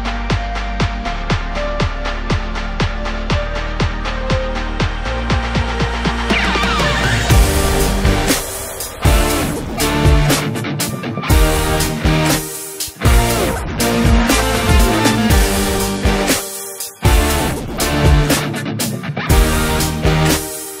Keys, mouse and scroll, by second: 2.0-2.7 scroll up 1, 2.7-3.5 scroll down 1, 3.5-6.9 drag, 6.9-7.6 scroll down 3, 7.6-8.2 middle drag, 8.2 click, 8.3-10.1 middle drag, 10.4-10.8 scroll up 1, 10.8 middle click, 11.7-15.9 drag, 15.9 scroll down 1, 16.1-16.7 middle drag, 16.7-17.1 scroll up 2, 17.1 KP_1, 17.6-18.0 shift+middle drag, 18.0 scroll up 2, 18.2 scroll down 3, 18.4-19.4 middle drag, 19.4-20.1 scroll down 2, 20.1-20.8 scroll up 2.